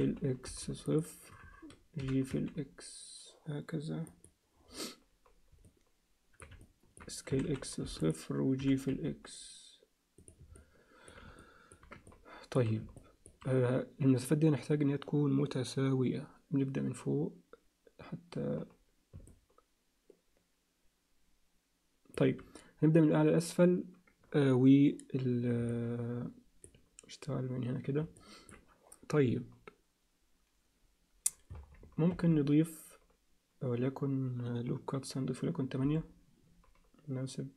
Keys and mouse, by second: 2.0 g, 5.6 middle click, 6.6 ctrl+alt+middle click, 7.3 s, 8.6 g, 10.5 alt+middle click, 11.4 ctrl+alt+middle click, 12.1 alt+middle click, 13.0 ctrl+alt+middle click, 19.3-22.1 alt+middle drag, 25.7 alt+middle click, 28.2 alt+middle click, 32.1 ctrl+r.